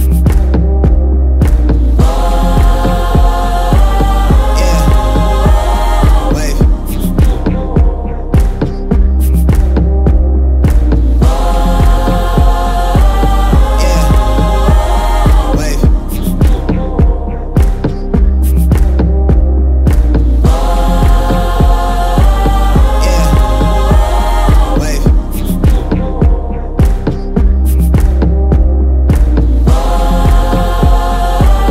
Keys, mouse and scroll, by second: 4.9-6.5 drag, 9.9-14.0 drag, 19.4-23.6 drag.